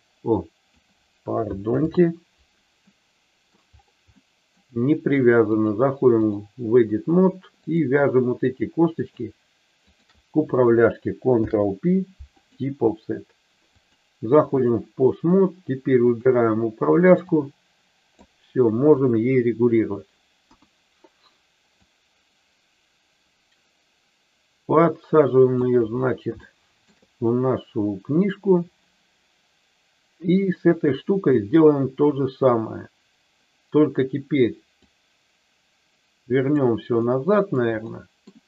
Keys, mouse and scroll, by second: 1.8 ctrl+z, 2.7 middle click, 4.1 middle click, 5.5 click, 7.5 click, 9.0 shift+click, 9.7 shift+click, 11.4 ctrl+p, 13.7 click, 16.1 click, 17.3 click, 18.9 KP_3, 20.4 KP_1, 21.7-25.5 drag, 26.4 shift+middle click, 34.9-36.5 drag, 37.0 middle click, 37.9 middle click.